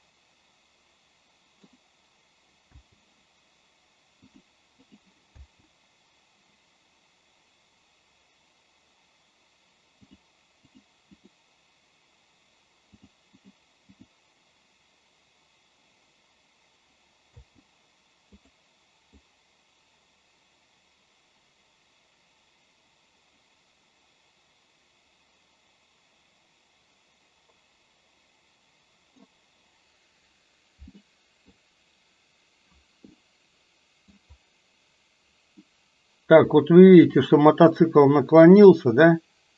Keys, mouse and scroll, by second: 2.9 space, 4.4 click, 5.0 click, 5.5 space, 10.1 click, 11.3 click, 13.1 click, 13.5 click, 14.1 click, 17.4 space, 18.4 click, 19.2-29.4 drag, 31.1 middle click, 33.3-34.3 middle drag, 35.6 middle click, 38.6-39.5 drag.